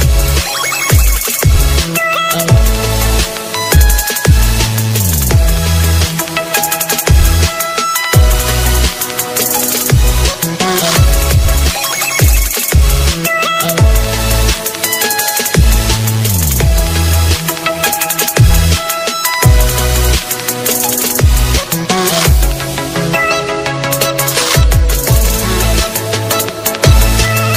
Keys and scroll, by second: 1.6 ctrl+space, 2.5 alt+space.